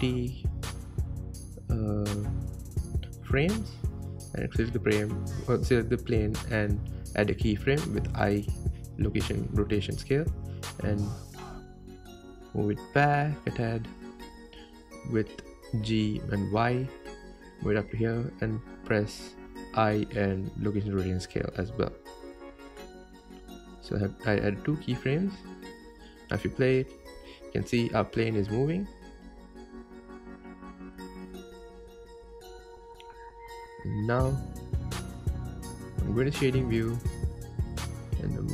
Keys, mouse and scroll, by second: 3.0 click, 8.2-13.4 drag, 13.4 KP_0, 15.5 g, 27.4 space, 33.2 space, 35.7 click, 37.4 click.